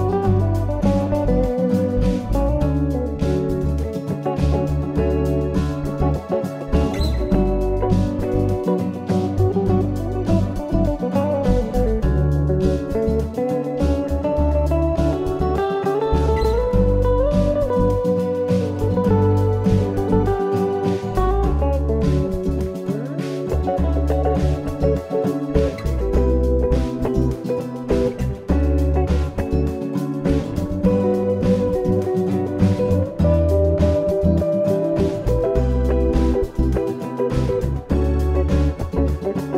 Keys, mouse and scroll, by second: 1.6 click, 3.1 middle click, 5.2 shift+click, 9.1 middle click, 10.8 i, 17.0 ctrl+e, 25.3 middle click, 27.6-28.0 scroll up 1, 28.0-28.3 scroll down 2, 28.5-29.4 scroll up 3, 29.4 middle click, 33.8-34.1 scroll up 1, 34.1-35.2 scroll down 4, 35.2 click, 35.4 click, 38.3 click.